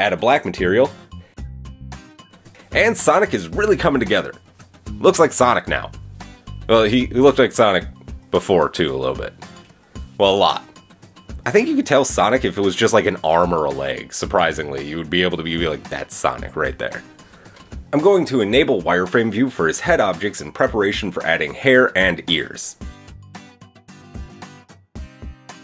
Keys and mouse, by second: 0.4-2.4 drag, 2.9-12.0 drag, 5.5 KP_1, 10.8 middle click, 10.8 right click, 12.0-13.2 middle drag, 13.2 click, 13.4-14.2 middle drag, 14.2 click, 14.3-15.3 middle drag, 15.3 click, 16.0-17.2 middle drag, 17.2 click, 17.3-17.8 middle drag, 17.8 click, 18.8 click, 21.3 click, 22.0-23.0 drag, 24.0-25.0 drag, 25.1 click.